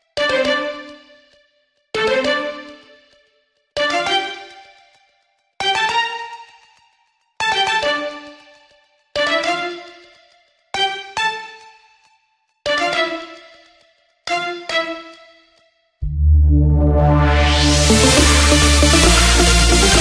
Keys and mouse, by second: 4.4 click, 8.4-12.4 drag.